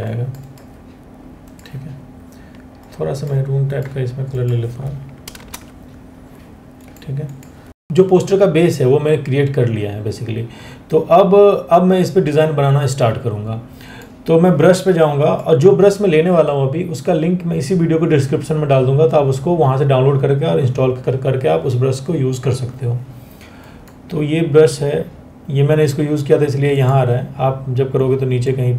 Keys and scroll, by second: 4.9 ctrl+BackSpace.